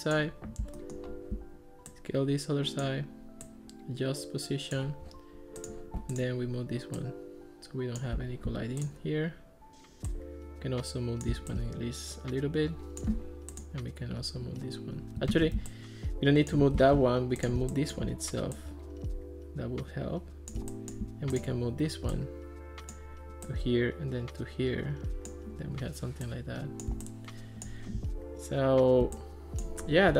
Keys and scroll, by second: 15.5 super+z, 16.8 super+z.